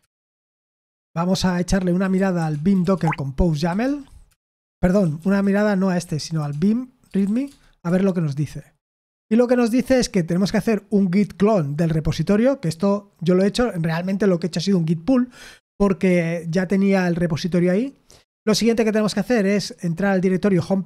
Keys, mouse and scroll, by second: 1.7-3.6 typing, 3.8 Tab, 4.2 Return, 4.7-7.8 typing, 8.9 Return, 11.6 click, 20.2 click.